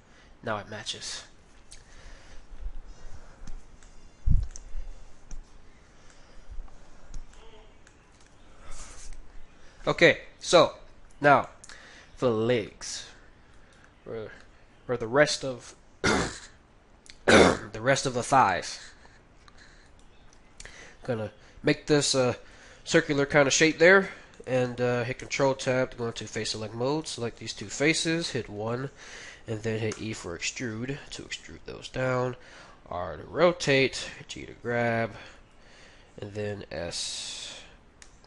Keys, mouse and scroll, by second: 3.8-9.7 middle drag, 8.2 KP_1, 10.6-16.3 middle drag, 11.1 Tab, 13.6-15.2 right drag, 15.3 g, 19.8-21.6 right drag, 20.3 g, 22.8-26.3 middle drag, 25.2 ctrl+Tab, 26.4-28.2 middle drag, 26.9-29.2 right drag, 28.2 KP_1, 29.9 e, 32.1 r, 34.0 g, 35.4 g, 35.7 g.